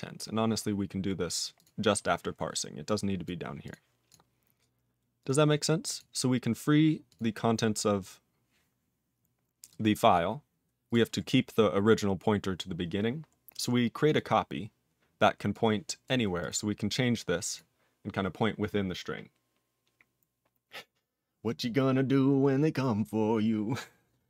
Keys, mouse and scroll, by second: 0.0 scroll up 3, 1.6 click, 2.2 click, 2.4-2.8 scroll down 2, 2.8 click, 3.2 click, 3.6 click, 5.2 click, 5.8 click, 5.9 click, 7.1 click, 8.0-8.7 scroll up 6, 9.7 click, 10.1 click, 10.9 click, 13.4-14.1 scroll down 1, 14.1 click, 15.5 click, 16.0 click, 16.4 click, 17.5 click.